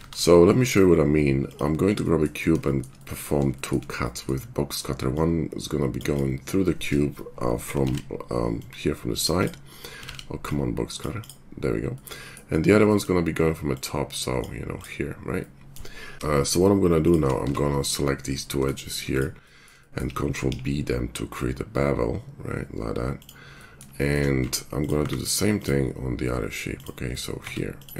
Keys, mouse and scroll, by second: 0.0 shift+a, 5.1-16.1 drag, 7.9 ctrl+z, 10.1 ctrl+z, 16.1-18.7 middle drag, 16.1 q, 16.1 g, 17.4 Tab, 19.0 shift+click, 20.5 ctrl+b, 24.4 Tab, 24.7 click, 25.0 q, 27.4 Tab.